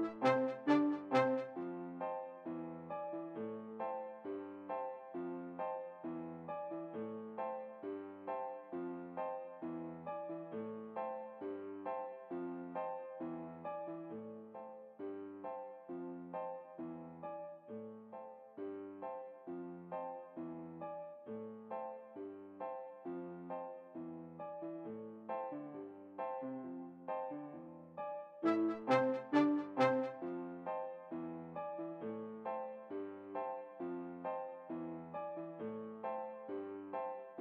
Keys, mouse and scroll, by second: 1.8-3.3 drag, 7.5-9.0 middle drag, 19.4-20.5 drag, 24.3-27.0 drag, 27.1 click, 28.8-30.3 drag, 35.5-36.8 drag.